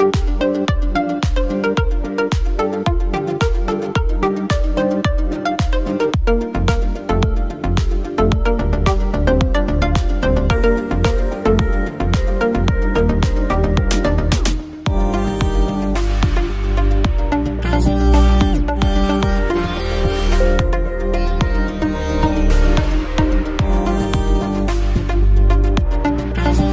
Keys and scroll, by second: 1.5 Return, 3.4 ctrl+v, 6.9-10.5 typing.